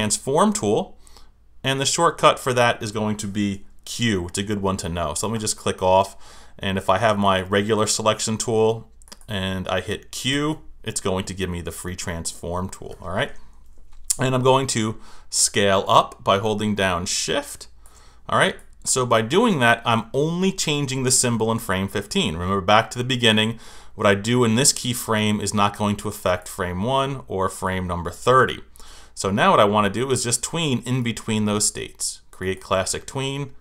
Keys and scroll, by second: 10.3 q.